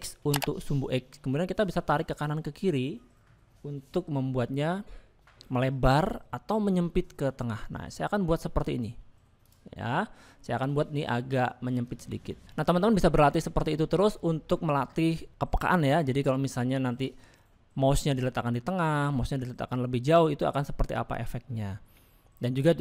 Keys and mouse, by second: 10.0 middle click, 14.5 middle click, 16.5 middle click, 17.9 middle click, 21.8 middle click.